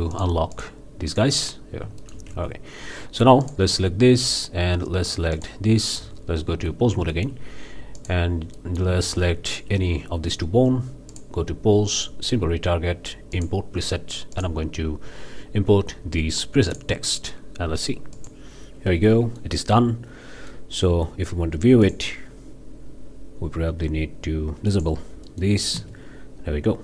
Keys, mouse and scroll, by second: 0.1 drag, 0.6 click, 1.1 click, 1.6 scroll down 3, 2.0 shift+middle click, 2.3 shift+Tab, 3.4-3.7 drag, 5.4-5.7 shift+drag, 6.0 shift+Tab, 7.1 shift+middle click, 8.0-8.3 drag, 8.6-9.0 middle drag, 9.5-9.8 shift+drag, 11.1 click, 13.3-13.7 drag, 14.3-14.6 drag, 16.7 click, 18.2 click, 18.9 click, 19.3 middle click, 20.3-20.7 middle drag, 20.9 Tab, 21.8-22.1 drag, 24.7 click, 25.3-25.6 middle drag, 25.7 space.